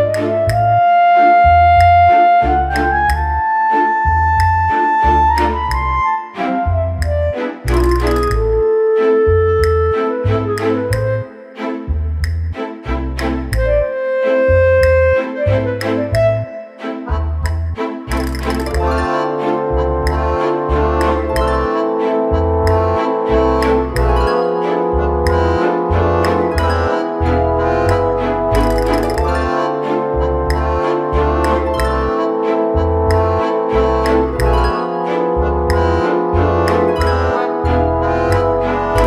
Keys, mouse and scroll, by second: 1.3 click, 2.2 Tab, 2.7 middle click, 3.1 scroll up 1, 3.8 middle click, 6.1 scroll down 2, 7.1 shift+d, 9.3 middle click, 9.7 shift+middle click, 11.7 click, 14.6 click, 20.9 click, 21.6 click, 22.1 click, 23.1 click, 23.9 click, 24.6 click, 31.3 click.